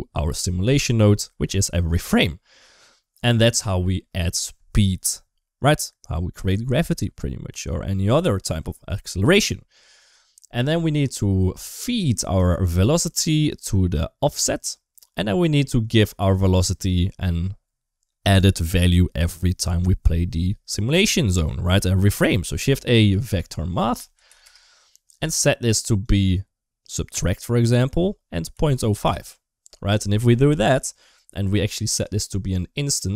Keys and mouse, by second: 0.9 middle click, 3.3 click, 10.3 middle click, 12.3 shift+d, 14.1 click, 15.2 middle click, 15.6-16.8 drag, 22.1 shift+a, 26.0 click, 27.5-28.9 drag, 31.7-32.9 drag.